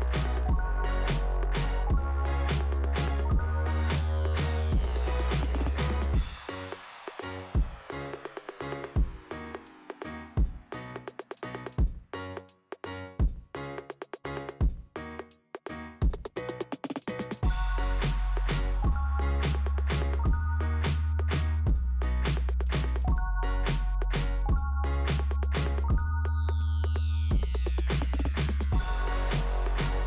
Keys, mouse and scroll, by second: 4.3 click, 4.5 click, 4.6 double click, 4.8 double click, 5.2 double click, 5.3 double click, 5.5 double click, 6.0 double click, 6.1 double click, 6.5 click, 7.3 click, 9.0 click, 10.4 click, 11.5 click, 15.7 right click, 16.2 click, 17.6 click, 18.1 click, 19.9 click, 20.0 click, 21.7 click, 21.9 click, 23.6 click, 24.8 click, 27.8 scroll down 1, 29.4-30.0 scroll up 1.